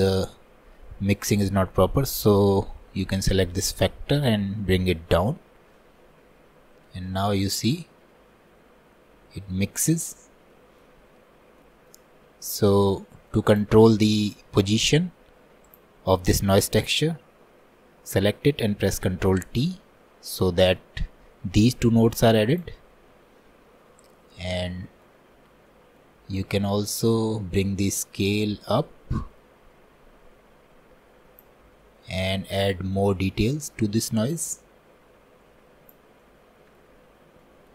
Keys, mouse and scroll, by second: 3.5-10.6 drag, 19.2 ctrl+t, 27.5-37.7 drag.